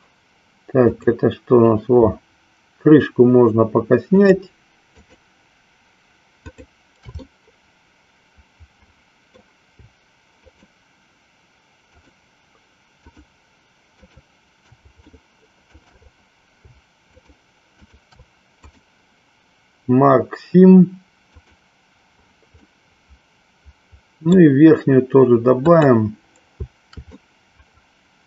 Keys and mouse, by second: 1.0 click, 4.0 shift+click, 5.1 shift+click, 6.6 shift+click, 7.3-9.5 middle drag, 10.5 shift+click, 11.8 shift+click, 13.0 shift+click, 14.0 shift+click, 15.1 shift+middle click, 18.0 shift+click, 18.7-21.6 right drag, 22.7-24.5 middle drag, 25.5 click, 27.1-28.2 middle drag.